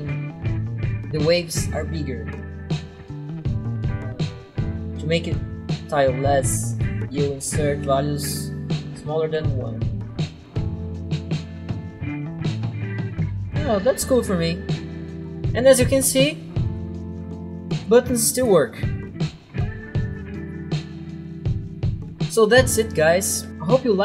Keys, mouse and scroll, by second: 6.4-7.2 typing, 7.8 Tab, 9.0 Tab, 10.3-10.6 typing, 10.6 Return, 17.8 click, 21.9 double click.